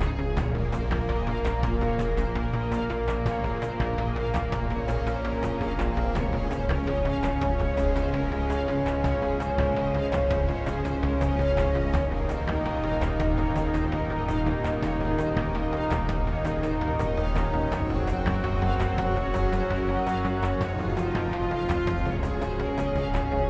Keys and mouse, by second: 0.5 shift+a, 1.4-3.4 drag, 3.4-14.7 middle drag, 15.7 ctrl+b, 20.4 click, 21.9 click, 23.2 z.